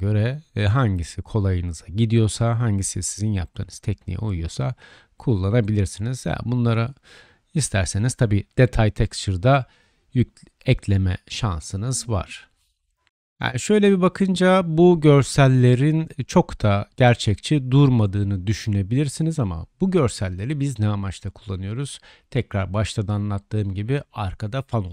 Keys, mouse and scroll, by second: 4.2 Tab, 4.8-6.6 drag, 6.2 Tab, 6.7-8.5 drag, 8.3 3, 8.6-13.1 drag, 10.9-12.2 middle drag, 10.9 l, 11.3 l, 14.9-16.3 middle drag, 16.3-22.3 drag, 17.2 shift+middle drag, 17.2 shift+right drag, 17.3-17.8 shift+middle drag, 22.4-24.9 shift+drag.